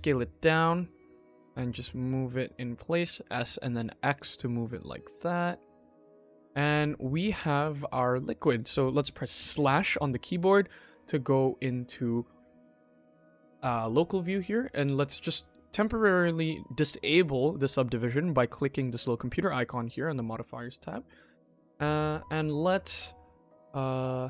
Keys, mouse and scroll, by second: 1.0 g, 2.2 s, 3.6 5, 5.9 click, 6.1 Tab, 6.4 click, 6.7-7.0 middle drag, 7.2-7.6 scroll down 2, 7.6 click, 7.8 click, 9.4 /, 10.6 click, 11.1 middle drag, 11.6-12.9 scroll down 2, 12.9-13.2 middle drag, 12.9 scroll down 1, 13.5-13.9 scroll up 2, 13.9 middle click, 14.6 middle click, 20.6 click, 21.4-21.8 middle drag, 22.3 Tab, 24.1 click.